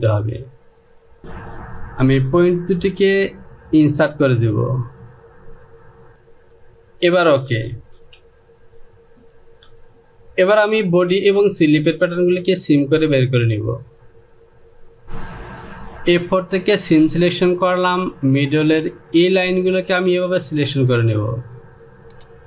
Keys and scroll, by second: 8.6 Home.